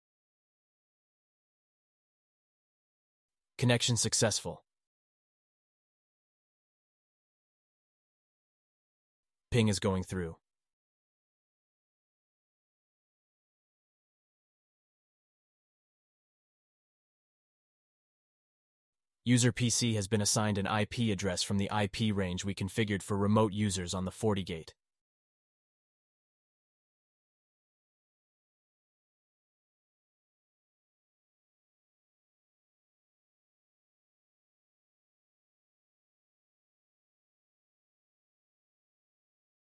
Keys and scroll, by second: 36.4 alt+q.